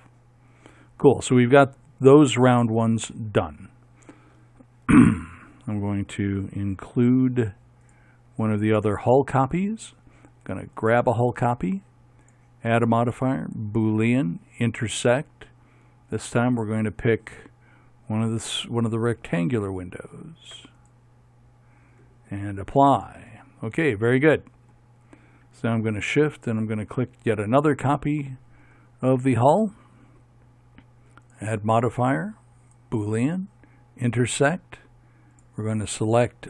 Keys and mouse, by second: 2.1 middle click, 7.5-9.7 middle drag, 9.7 click, 10.2 middle click, 10.7-12.4 right drag, 12.4-13.7 drag, 16.3-21.5 drag, 23.4-25.9 drag, 26.9-36.4 drag.